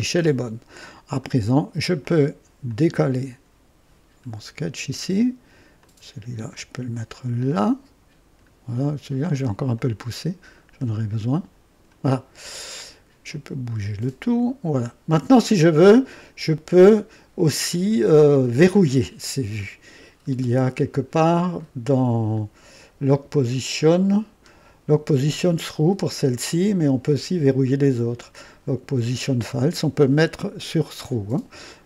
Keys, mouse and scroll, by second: 1.1 right click, 2.0 click, 2.6-5.0 drag, 5.8-8.5 drag, 9.7-12.0 drag, 12.6 scroll up 1, 13.6-14.9 drag, 20.0-20.4 scroll up 1, 21.5 click, 22.4-22.7 scroll down 2, 23.8-24.2 scroll up 2, 27.0 click.